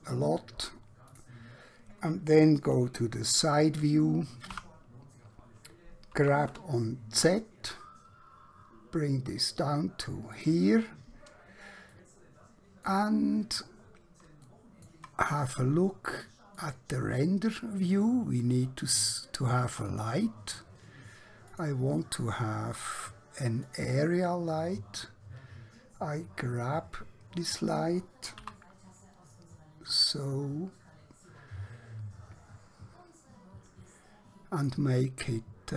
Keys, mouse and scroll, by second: 0.0-0.4 typing, 1.1 click, 4.5 KP_1, 6.3 g, 6.6 z, 10.4 click, 12.0 middle click, 13.3-13.7 scroll down 1, 13.7-14.4 scroll up 1, 14.5 shift+middle click, 16.5 click, 19.9 click, 28.5 g, 34.7 click.